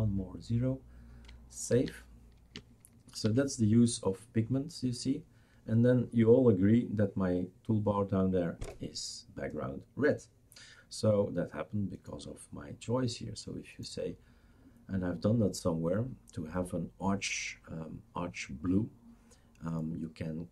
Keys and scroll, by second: 1.7 ctrl+s, 3.2 shift+super+r, 3.4 ctrl+s.